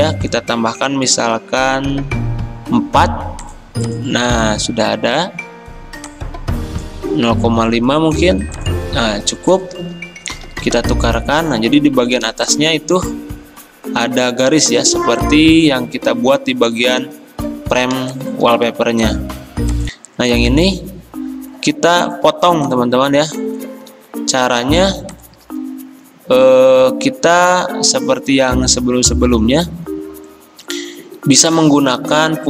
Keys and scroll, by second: 2.8 4, 7.4 5, 10.6 x, 25.4 ctrl+z.